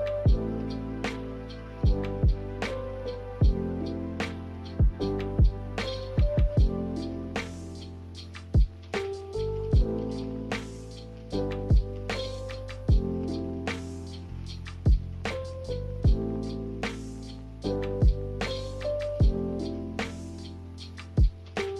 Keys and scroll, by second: 2.8 b, 5.6 a, 17.2 m.